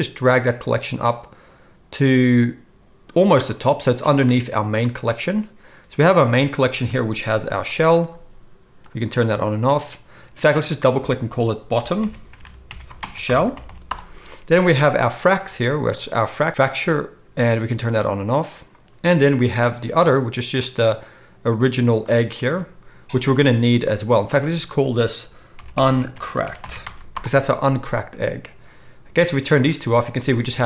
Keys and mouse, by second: 4.6 click, 4.6 middle click, 6.7-7.3 drag, 6.7-7.3 middle drag, 7.3 g, 7.7-8.8 middle drag, 8.8 click, 8.9 middle click, 9.1 click, 9.2-10.5 middle drag, 10.5-14.8 drag, 12.4 t, 13.6 l, 14.8-15.9 middle drag, 15.9 click, 16.0-17.4 middle drag, 17.4 click, 17.7 middle click, 17.8 click, 17.9-19.4 middle drag, 19.4 click, 19.5-20.6 middle drag, 20.6 click, 20.8-22.0 middle drag, 22.0 click, 22.1 middle click, 22.3 click, 24.4-29.3 drag, 29.7 click.